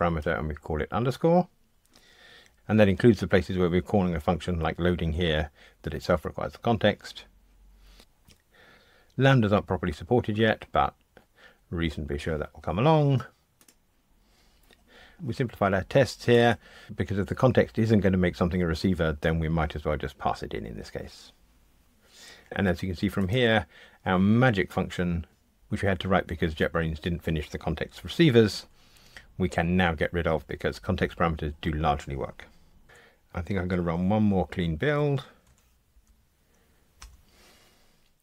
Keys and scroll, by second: 34.9 ctrl+alt+r.